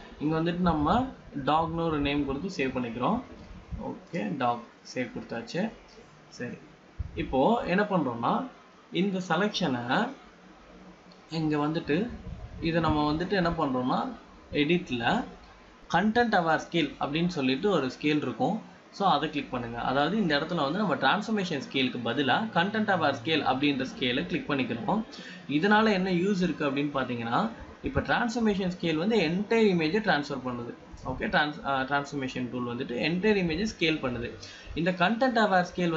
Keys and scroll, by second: 9.0 g, 12.4 ctrl+d.